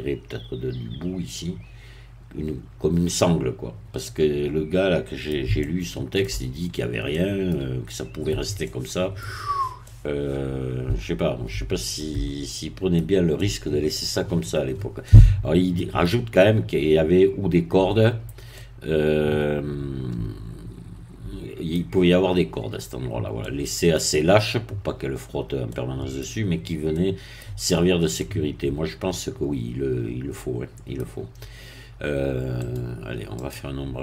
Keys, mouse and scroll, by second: 4.0-5.5 middle drag, 5.6-6.7 shift+middle drag, 7.1 middle click, 8.6-9.7 middle drag, 9.9-13.1 middle drag, 13.4 middle click, 15.1 middle click, 18.5-22.2 middle drag, 23.4 middle click, 25.7 middle click, 26.9 middle click, 28.2-31.1 middle drag, 32.6 right click, 33.4 click.